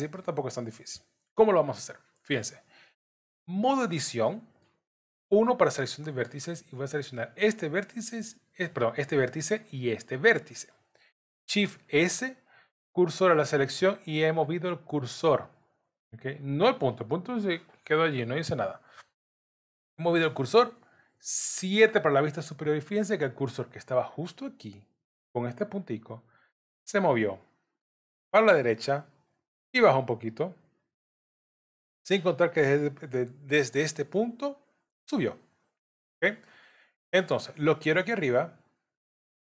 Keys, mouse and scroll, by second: 0.1 middle click, 3.6 Tab, 4.3 middle click, 5.3 1, 5.8 middle click, 7.2 click, 10.1 shift+click, 11.7 shift+s, 21.8 KP_7, 31.1 middle click.